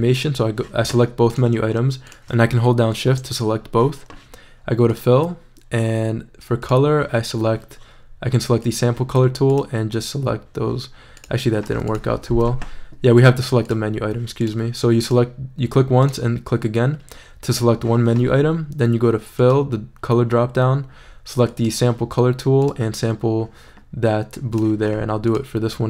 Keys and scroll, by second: 12.5 super+z.